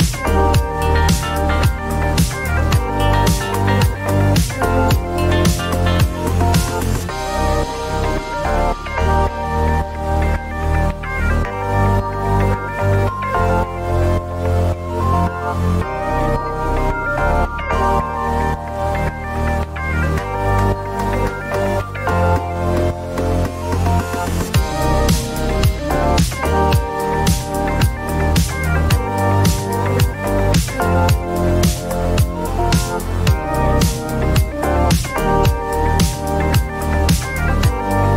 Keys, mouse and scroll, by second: 0.4 click, 1.5 click, 4.2 click, 12.2 click, 13.8 click, 16.4 click, 18.8 click, 19.6 click, 25.0 click, 26.5 click, 29.0 click, 29.4 0, 29.8 Return, 30.6 click, 31.6 click, 37.0 click.